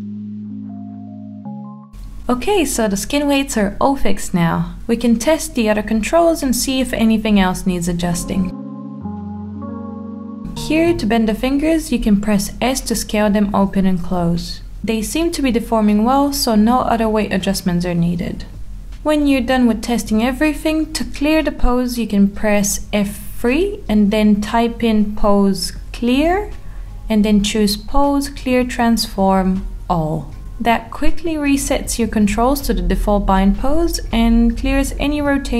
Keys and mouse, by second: 0.5 click, 0.6 click, 1.6 click, 1.9 middle drag, 2.3 middle click, 2.8 Tab, 4.5 middle drag, 5.2 Tab, 8.0 g, 9.3 click, 9.6 click, 9.8 g, 10.5 middle click, 10.7 g, 11.3 middle click, 11.5 r, 11.7 click, 11.8 middle click, 12.3 click, 12.5 middle click, 13.0 click, 13.7 s, 17.6 ctrl+z, 18.7 s, 20.9 Escape, 22.0 a, 22.6 F3, 30.2-32.2 middle drag, 34.6-35.0 shift+middle drag, 35.4-35.5 middle drag.